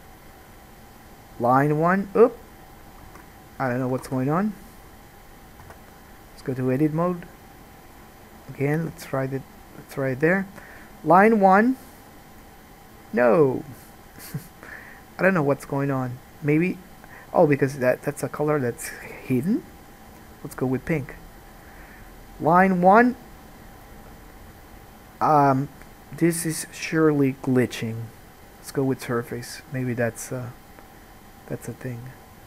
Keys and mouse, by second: 3.2 ctrl+z, 4.3 ctrl+z, 5.8 Tab, 8.1-9.2 drag, 19.1-22.3 drag.